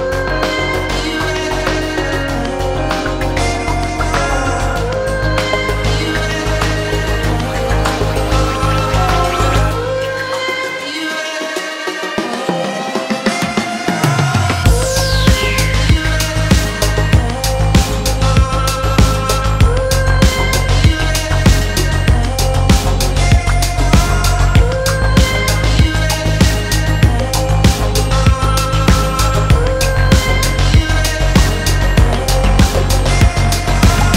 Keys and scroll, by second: 4.3 1, 4.6 6, 5.0 0, 5.4 Return.